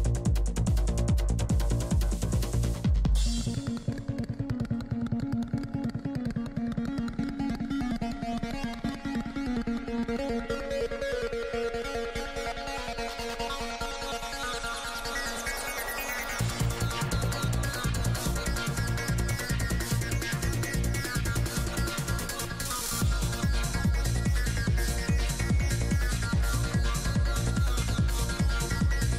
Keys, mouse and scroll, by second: 0.1-1.7 drag, 0.4 f, 1.3-2.3 middle drag, 1.7 f, 2.0 f, 2.3-4.1 drag, 2.6 middle click, 3.2 f, 3.8 middle click, 4.1 f, 4.2 click, 4.6 middle click, 4.8 f, 5.0 click, 5.5 middle click, 6.0 click, 6.5 middle click, 6.9-8.5 drag, 7.4 middle click, 8.4 middle click, 9.1-11.3 drag, 10.2 middle click, 10.6 f, 11.2 middle click, 11.7 f, 11.9 click, 11.9 middle click, 12.4 i, 12.8 f, 13.0-16.6 drag, 15.2-16.7 middle drag, 16.9 click, 17.4 middle click, 18.0 g, 18.0 f, 18.5 f, 20.0 click, 20.0 right click, 20.2 f, 20.5 click, 20.5 right click, 21.0 right click, 21.4-22.5 middle drag, 22.9-24.9 drag, 22.9-24.9 right drag, 24.9 middle click, 26.3 click, 27.2 f, 27.7-29.1 drag.